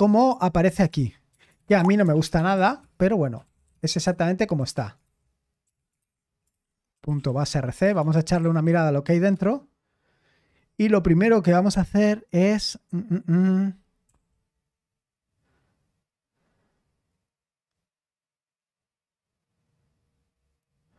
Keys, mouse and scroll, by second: 0.0-9.3 typing, 10.3-11.1 typing, 11.7 ctrl+d, 14.0 ctrl+d.